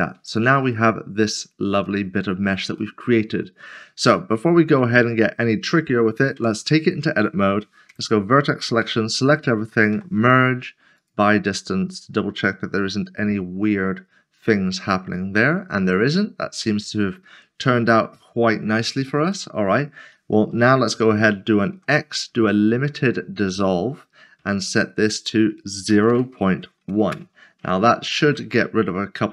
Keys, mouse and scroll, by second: 0.3 click, 0.9 middle click, 1.8 shift+middle click, 4.3 scroll up 1, 5.5 scroll down 1, 8.0-8.8 typing, 9.9 typing, 11.0 click, 12.8 middle click, 19.3 middle click, 23.0 typing, 25.9-26.4 typing, 27.1 Return.